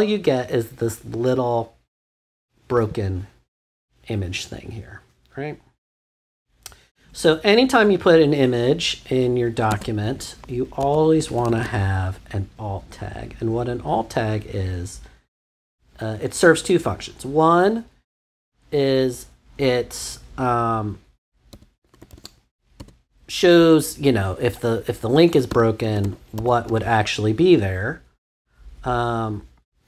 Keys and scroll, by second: 9.6-12.0 typing, 15.5 =, 21.3-22.7 typing, 25.0-26.0 typing.